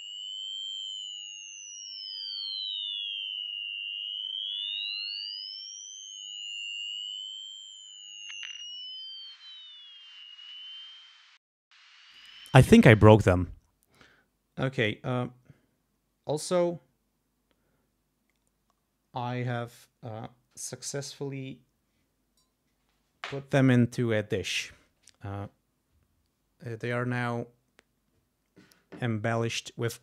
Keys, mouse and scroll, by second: 12.1 click.